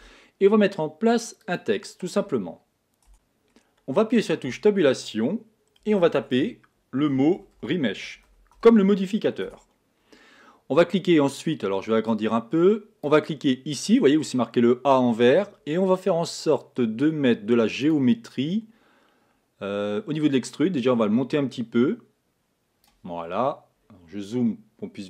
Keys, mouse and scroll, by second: 3.1 z, 4.8 Tab, 6.2-8.9 typing, 9.8 Tab, 12.5-14.2 drag, 18.3-23.8 drag, 23.8-25.0 scroll up 14.